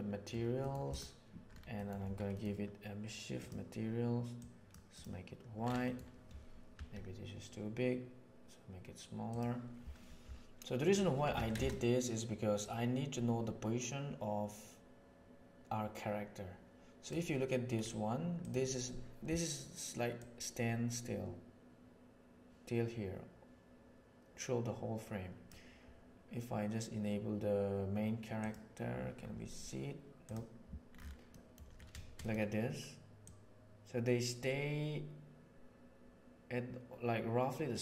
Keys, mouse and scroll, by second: 0.8 middle click, 1.8 middle click, 5.9 middle click, 6.7 s, 11.3 alt+a, 12.6 click, 14.3 middle click, 14.5 middle click, 14.7 middle drag, 16.4-17.0 middle drag, 18.3 middle click, 20.1-22.6 drag, 25.1-25.4 drag, 28.4 click, 31.2 middle click, 32.2 middle click, 33.2-35.6 drag, 35.6-37.8 middle drag.